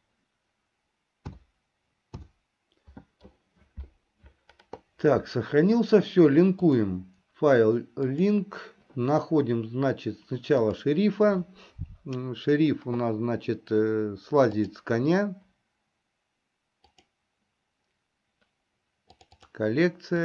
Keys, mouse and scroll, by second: 6.8-9.9 drag.